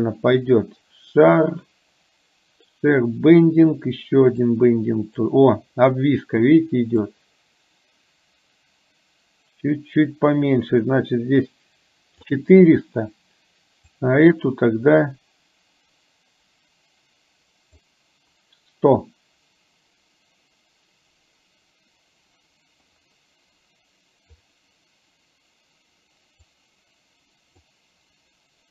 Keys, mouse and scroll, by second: 4.5 click, 7.0-12.3 drag, 13.9-17.9 drag, 26.7-27.8 drag.